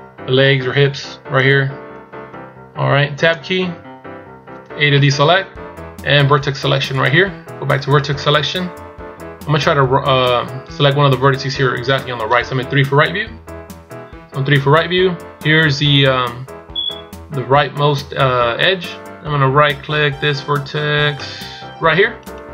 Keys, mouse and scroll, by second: 7.1 click, 13.3 KP_3, 22.4 right click.